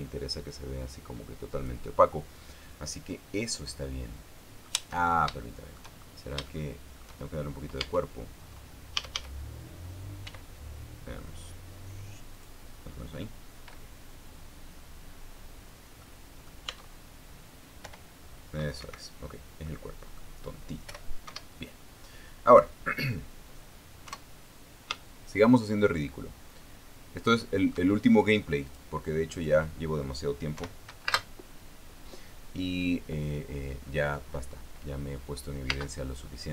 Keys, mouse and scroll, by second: 0.0-2.5 drag, 4.8 middle click, 5.5-6.0 shift+scroll down 1, 6.0 shift+middle click, 6.6 shift+scroll down 1, 6.7 shift+scroll up 1, 6.9 shift+scroll down 1, 7.1 shift+middle click, 7.9 shift+scroll down 1, 7.9 shift+scroll up 1, 8.1-8.8 shift+scroll down 1, 8.5 Tab, 9.6 a, 10.9 e, 13.0 click, 16.3-16.7 scroll down 2, 16.7-17.9 middle drag, 18.5 p, 19.5 Escape, 20.3 middle click, 21.5 p, 21.9 Escape, 24.8 KP_0, 26.2-28.6 shift+middle drag, 29.4 click, 30.0 click, 31.2 p, 31.8 space.